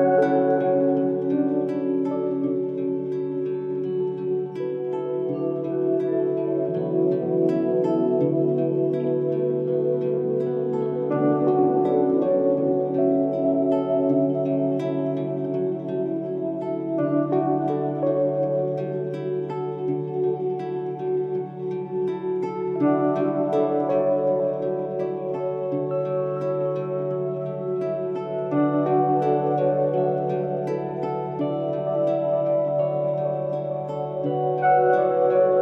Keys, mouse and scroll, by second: 2.2 click, 4.7 click, 7.0 ctrl+i, 8.4-21.0 drag, 29.8 click, 30.8-35.6 drag.